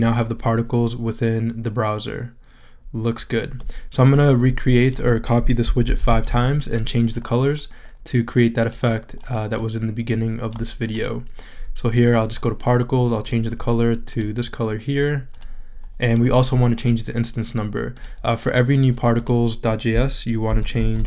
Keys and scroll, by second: 5.8 super+c, 6.0 super+v, 20.4 super+c, 20.7 super+v.